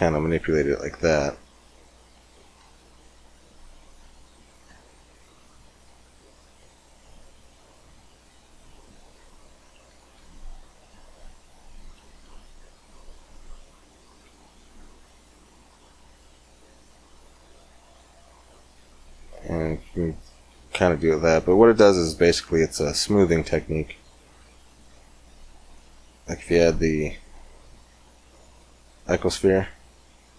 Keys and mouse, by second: 0.3-1.9 drag, 2.4 ctrl+r, 4.5 ctrl+r, 6.3 ctrl+r, 9.8 ctrl+r, 12.1 ctrl+r, 17.5 middle click, 18.0 Tab, 22.2-24.4 middle drag, 24.4 click, 24.7 x, 25.6 shift+a.